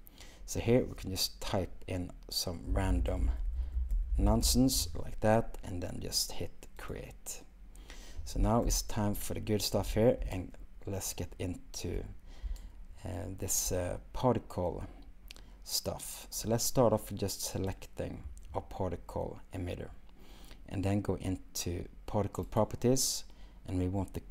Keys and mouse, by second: 3.6 u, 17.7 click, 22.6 click.